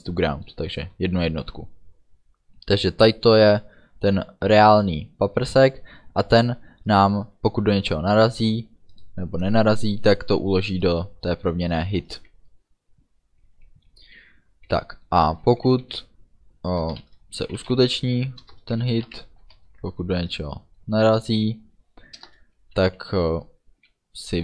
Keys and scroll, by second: 15.6 i, 15.9 f, 17.0 shift+9, 17.7 h, 17.8 i, 17.9 t, 18.5 Return, 19.1 Right, 19.5 space, 20.1 shift+ú, 22.2 Return.